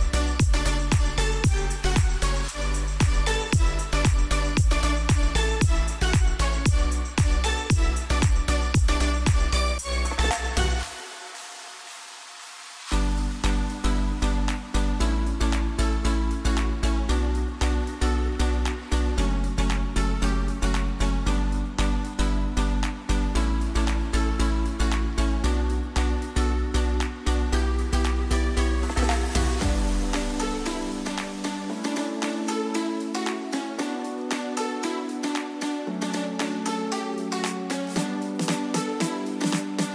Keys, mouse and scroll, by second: 1.2 click, 2.0 click, 5.1-5.7 alt+scroll down 1, 6.2 scroll down 1, 8.3-10.2 scroll down 1, 12.2 click, 13.1 Up, 15.8 scroll down 1, 16.8 click, 17.6-21.5 alt+drag, 21.5 t, 21.8 click, 24.4 click, 30.5-32.6 typing.